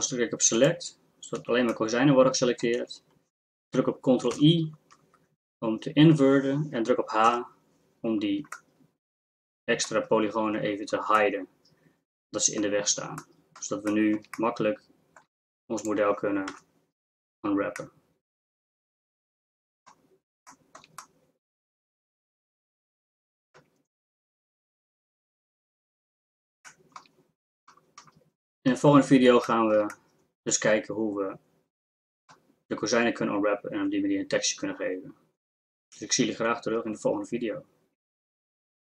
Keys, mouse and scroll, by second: 1.4 z, 1.7-2.7 middle drag, 2.7 z, 4.3 ctrl+i, 7.3 h, 8.6-10.7 middle drag, 15.8 click, 16.5 KP_Decimal, 30.0-31.2 middle drag.